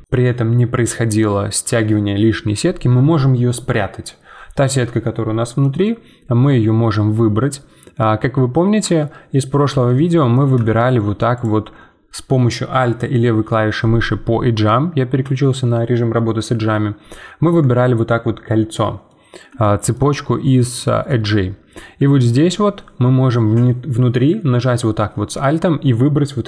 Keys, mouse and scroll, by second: 5.6 shift+middle click, 6.1-7.0 scroll up 2, 7.0-8.2 scroll up 1, 8.2-8.6 scroll up 5, 8.6 2, 9.4-9.8 scroll down 7, 9.8-11.3 middle drag, 11.3-14.4 alt+drag, 19.1-20.2 middle drag, 20.2-20.8 scroll up 2, 20.8 shift+middle click, 21.2-21.5 scroll up 5, 22.2-25.3 alt+drag.